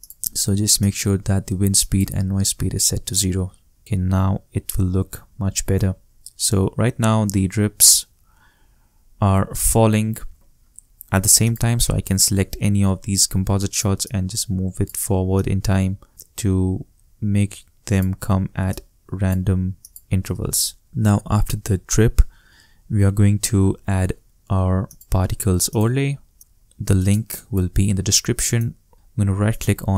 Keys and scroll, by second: 3.8 shift+space, 7.5 shift+Return, 20.2 shift+space.